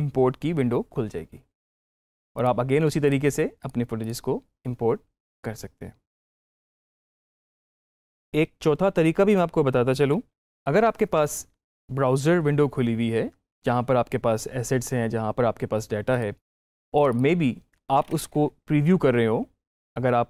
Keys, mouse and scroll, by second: 2.2 click, 7.7 click, 10.0 click, 10.4 alt+Tab, 16.0 click.